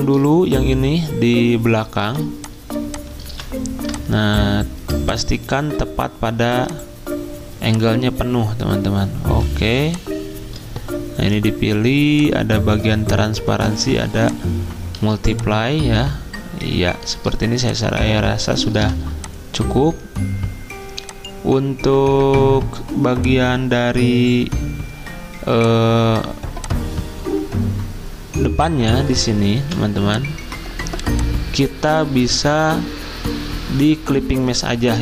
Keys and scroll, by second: 6.4 typing, 14.9 z, 18.8 v, 29.5 v.